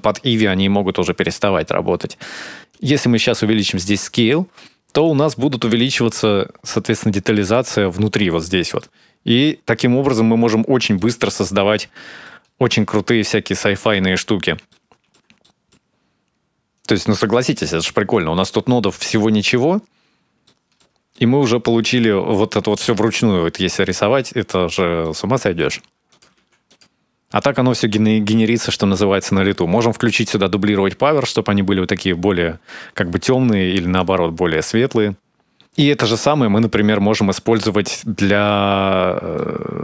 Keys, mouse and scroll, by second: 2.5 click, 8.6 middle click, 9.5-9.9 scroll up 3, 10.1 scroll down 1, 10.7 middle click, 11.5-12.0 scroll up 2, 12.0 shift+middle click, 12.9 scroll up 2, 13.4-14.2 scroll down 7, 14.5 shift+middle click, 15.2 middle click, 15.7-16.2 scroll up 2, 16.2-16.5 scroll down 3, 16.6 scroll up 1, 17.2 shift+middle click, 17.7-18.8 scroll down 11, 18.5 middle click, 19.6-20.2 scroll up 1, 20.2 scroll up 2, 20.2 shift+middle click, 20.9 middle click, 21.3 scroll up 1, 21.5-22.6 scroll down 3, 23.9-24.6 scroll up 6, 24.8 middle click, 25.9 click, 26.2 shift+d, 32.3 scroll up 2, 32.6-33.3 scroll down 1, 33.3 click, 33.3-33.7 scroll down 1, 34.2 scroll down 3, 34.4 scroll up 2, 34.6 shift+middle click, 34.9 middle click, 35.6 middle click, 38.8-39.5 scroll up 2, 39.2 middle click.